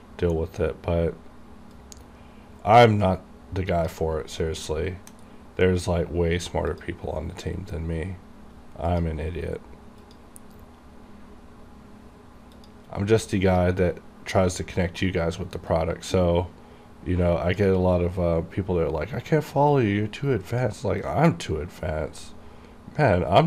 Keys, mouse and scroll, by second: 2.2-4.3 drag, 4.3-4.8 scroll up 1, 4.8 KP_1, 5.3 scroll down 1, 5.8 middle click, 6.8 click, 11.0-11.4 scroll down 1, 12.7 click, 15.8-18.1 drag, 18.1-18.4 scroll down 1, 19.8 click, 21.1-23.4 drag.